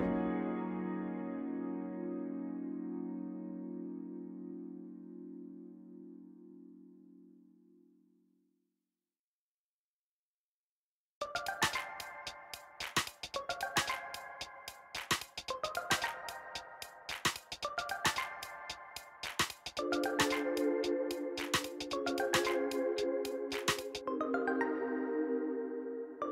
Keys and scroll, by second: 0.3 Return, 0.4-3.1 typing, 1.8 Return, 2.0 alt+a, 2.9 Return, 4.1 ctrl+-, 4.4 f, 5.1 ctrl+z, 5.4 g, 5.7 z, 9.0 g, 9.1 z, 13.4 Tab, 18.1 g, 18.2 r, 18.3 o, 18.7 Return, 20.6 4, 21.9 Return, 26.2 shift+a.